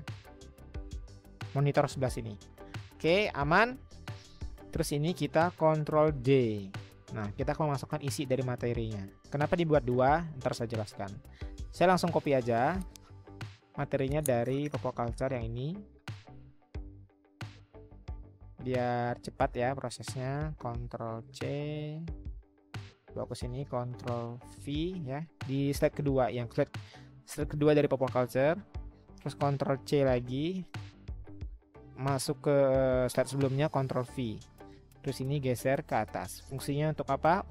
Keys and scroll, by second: 6.0 ctrl+d, 20.7 ctrl+c, 23.2 ctrl+c, 24.5 ctrl+v, 29.8 ctrl+c, 33.7 ctrl+v, 37.1-37.5 Up.